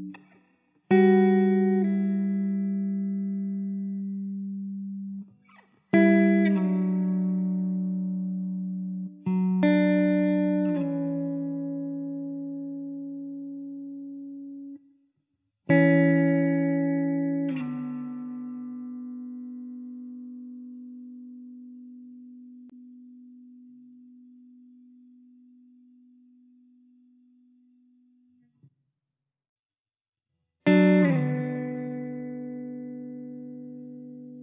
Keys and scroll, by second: 1.0 alt+z, 1.4 s, 3.6 KP_0, 7.9 Tab, 9.5 l, 10.3 shift+d, 18.9 alt+z, 20.7 `, 22.3 `, 24.7 s, 27.4 `, 28.3 alt+z.